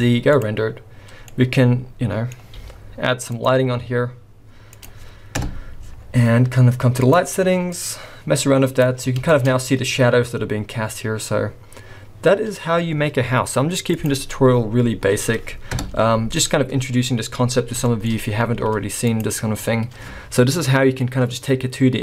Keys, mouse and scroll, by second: 14.0 click, 14.0 scroll down 6, 14.6-15.6 scroll down 6, 15.8 KP_0, 17.8 shift+middle click, 18.2-18.7 scroll up 3, 18.6 z.